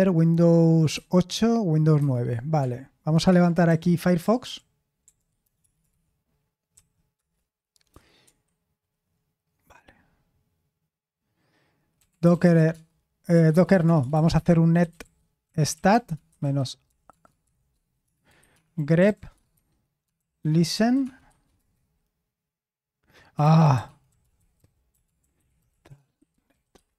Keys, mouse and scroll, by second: 0.9 super+8, 1.9 super+9, 3.3 alt+space, 3.6-6.7 typing, 7.1 Return, 8.2 super+7, 11.7-22.0 typing, 23.4-26.9 typing.